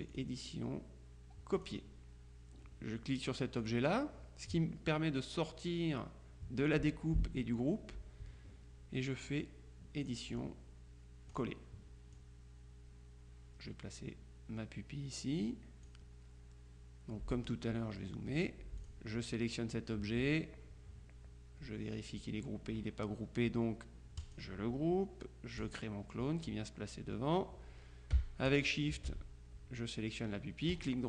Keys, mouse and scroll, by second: 0.2 click, 1.6 click, 3.7 click, 10.1 click, 11.4 click, 12.3-16.4 drag, 17.4 click, 18.6 click, 18.9 click, 24.3 click, 25.7 click, 28.6 shift+click, 30.8 right click.